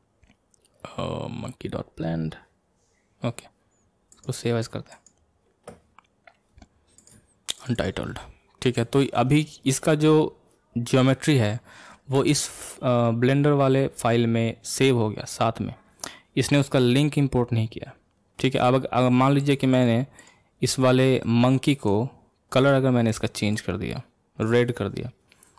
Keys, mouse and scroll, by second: 19.4 click, 19.7 drag, 20.2 click, 21.2-22.6 middle drag, 22.6 click, 23.5 click.